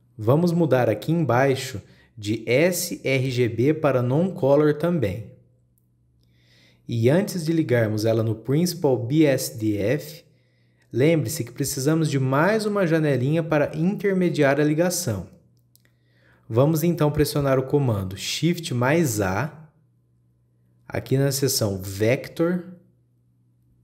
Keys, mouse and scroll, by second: 3.9-7.0 drag, 7.6-9.0 drag, 11.7 click, 12.4 click, 16.6 click, 19.9 shift+a.